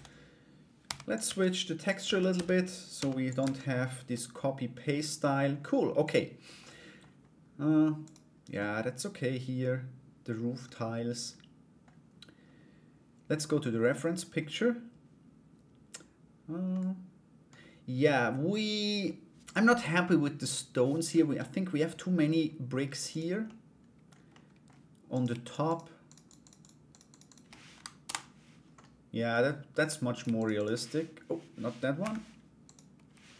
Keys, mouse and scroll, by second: 0.4 g, 0.8 Tab, 1.5 right click, 1.9 a, 2.5 g, 3.0 Tab, 3.7-5.1 middle drag, 5.6 right click, 6.2 middle click, 7.6 right click, 8.1-11.4 middle drag, 13.2 middle click, 16.3 middle click, 22.7 right click, 23.0 middle click, 23.9 middle click, 24.7 right click, 25.0 shift+right click, 25.2 shift+right click, 25.6 shift+right click, 25.8 shift+right click, 26.0 shift+right click, 26.5 shift+right click, 26.7 shift+right click, 27.6 Return, 27.6 Delete, 28.4 middle click, 29.7 right click, 29.9 shift+right click, 30.1 shift+right click, 31.6 Escape, 32.2 right click, 33.0 Delete.